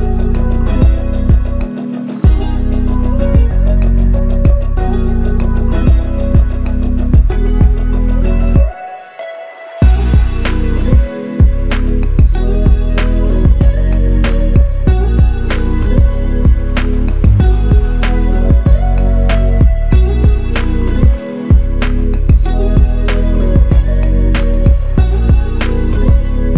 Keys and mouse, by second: 3.2 shift+click, 8.8 shift+click, 11.0 shift+click, 13.4-14.3 typing, 15.8 double click, 23.9 shift+click.